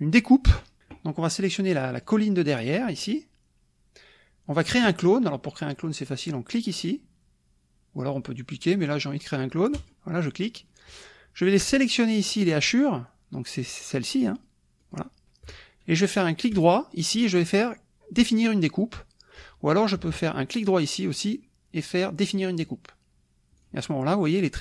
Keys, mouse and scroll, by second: 0.1 click, 0.8 middle click, 2.2 click, 5.1 middle click, 9.8 click, 14.4 click, 14.9 click, 15.1 middle click, 20.1 Escape, 20.5 right click, 22.7 click, 23.6 click.